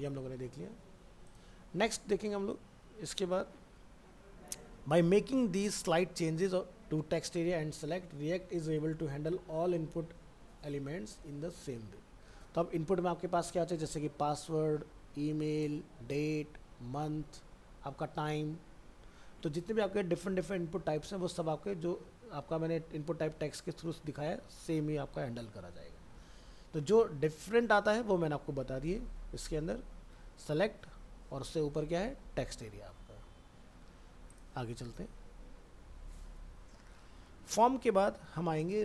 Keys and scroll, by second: 0.0 alt+Tab.